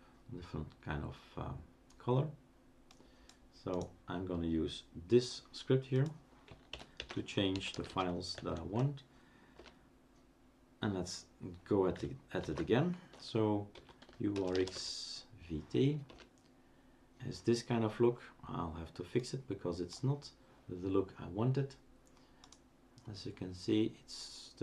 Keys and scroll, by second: 6.9-8.4 typing, 9.5 Return, 12.4 shift+super+d, 13.7-15.2 typing, 16.1 Return.